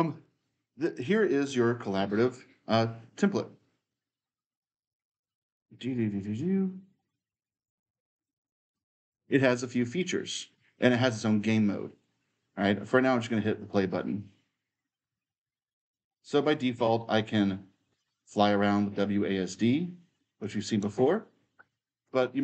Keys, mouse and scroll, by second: 0.0-2.7 right drag, 3.7-9.1 drag, 4.8-8.9 right drag, 9.1-11.7 right drag, 9.2 w, 13.4-15.4 drag, 15.7-21.7 right drag, 16.8-20.2 typing, 21.7 middle click.